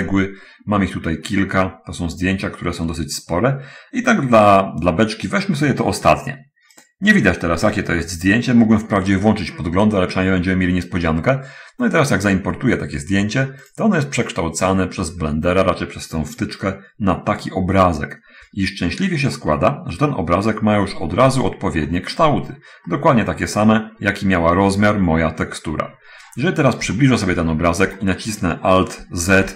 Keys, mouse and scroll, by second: 7.2 click, 14.1 click, 17.8-20.9 middle drag, 21.6 middle click, 22.3 middle click, 23.3 middle click, 26.6 scroll up 1, 27.0 shift+middle click, 27.9 shift+scroll up 1.